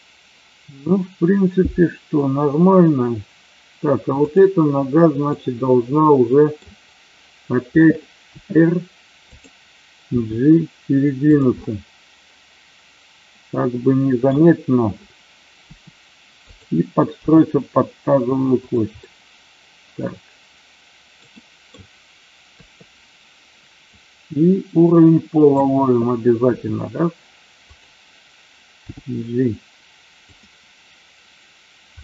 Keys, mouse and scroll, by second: 5.3-6.5 middle drag, 8.3 r, 10.2 g, 11.3 click, 11.6-14.3 middle drag, 15.7 r, 16.5 click, 17.2 g, 18.7 click, 19.0-21.2 middle drag, 21.2 scroll down 1, 21.3 middle click, 23.8-25.6 drag, 26.5 r, 27.7 click, 29.0 g, 30.3 click, 31.9-32.0 middle drag.